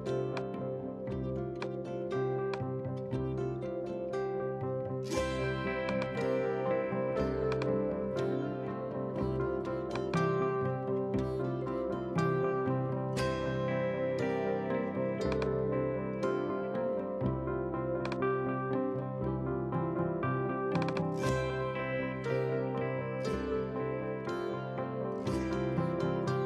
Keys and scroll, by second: 22.3-23.5 typing, 25.7 super+z.